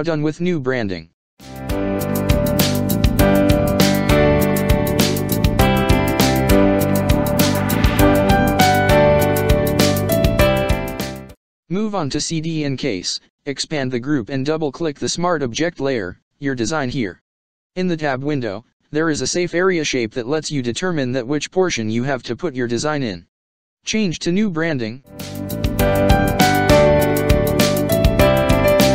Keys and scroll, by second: 0.8 ctrl+space, 1.3 ctrl+space, 2.9 space, 4.0 ctrl+-, 5.2 space, 7.8 ctrl+space, 8.4 ctrl+space, 9.4 ctrl+space, 23.4 ctrl+shift+[, 28.3 space.